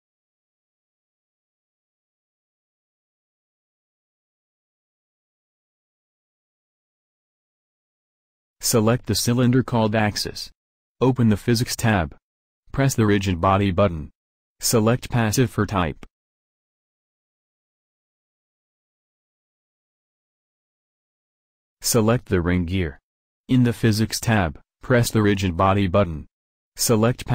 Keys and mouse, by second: 0.1 g, 4.5 r, 6.7-10.7 drag, 14.3-19.4 drag, 22.5-23.7 drag, 24.2-26.6 drag, 27.0-27.3 drag.